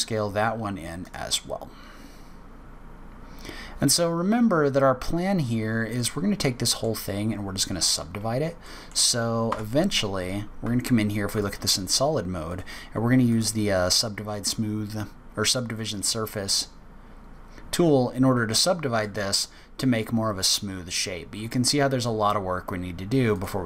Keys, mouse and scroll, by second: 1.7-2.1 scroll down 2, 2.1 scroll up 2, 3.1-3.7 scroll down 2, 4.2 scroll down 1, 5.5 scroll down 2, 6.0 middle click, 7.2-7.5 scroll up 2, 8.6 middle click, 9.5 Tab, 10.6 z, 12.5 click, 13.3 click, 16.7-17.3 scroll up 7, 17.4-18.9 scroll down 4, 18.9 click, 19.3 click, 23.3 click.